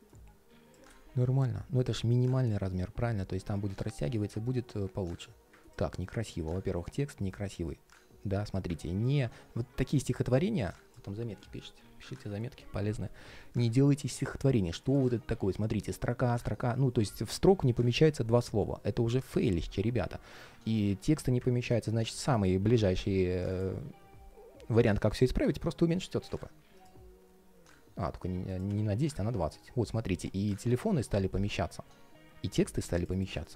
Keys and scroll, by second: 33.4 alt+space.